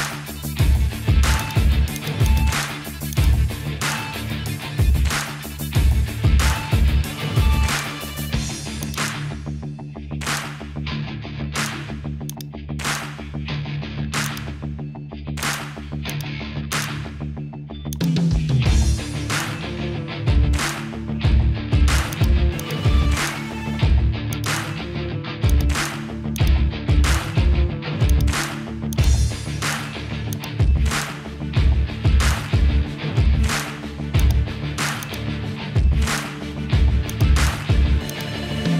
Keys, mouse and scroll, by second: 1.4 click, 2.3 shift+click, 3.1 shift+click, 4.8 ctrl+j, 8.0 Tab, 10.4 l, 12.3-14.3 drag, 15.4 click, 16.1 click, 17.9 click, 18.5 l, 22.3 click, 24.4 click, 28.1 click, 28.9 click, 30.3 click, 30.9 l, 34.2 click, 36.6 Tab, 37.1 click, 38.1 click.